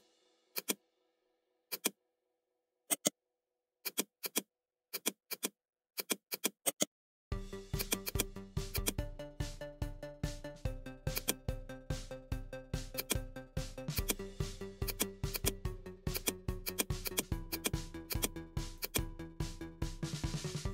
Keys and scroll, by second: 1.2 ctrl+g, 2.4 ctrl+j.